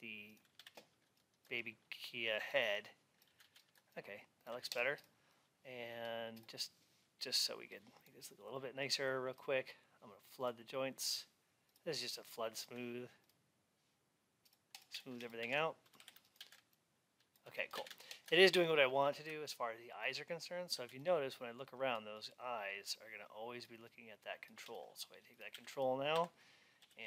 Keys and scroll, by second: 3.3 alt+x, 15.3 alt+x.